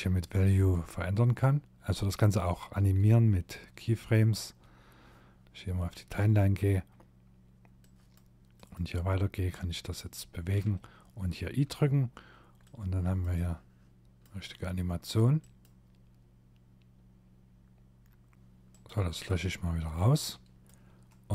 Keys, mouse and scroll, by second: 6.8 click, 9.6 i, 10.8 scroll down 2, 11.8 click, 12.3 click, 17.9 click, 18.3 click, 20.6 click, 20.6 middle click, 21.0 Tab.